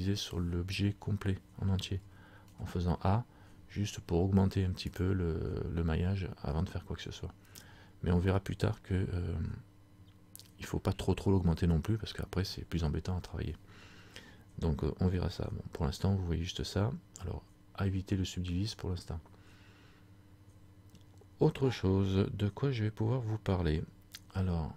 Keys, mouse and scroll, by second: 2.2 a, 5.0 click.